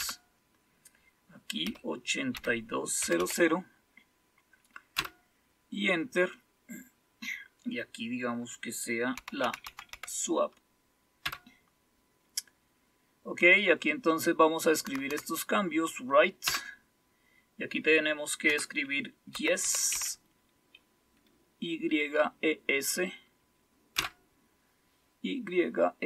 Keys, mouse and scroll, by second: 0.0 Return, 1.6-3.1 typing, 4.9 Return, 8.9-10.4 typing, 11.2 Return, 14.8 Right, 15.2 Right, 16.4 Return, 18.4 Caps_Lock, 19.0-20.4 typing, 23.9 Return.